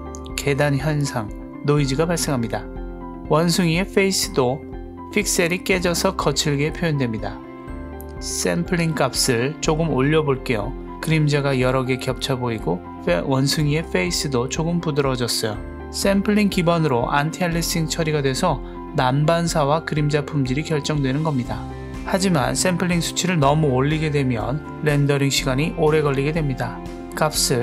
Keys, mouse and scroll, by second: 0.7-1.2 shift+middle drag, 1.3-2.1 scroll down 1, 2.1 KP_0, 3.7-4.1 shift+middle drag, 4.7 scroll up 1, 9.3-10.8 drag, 16.8-17.3 scroll down 1, 21.9-25.4 drag.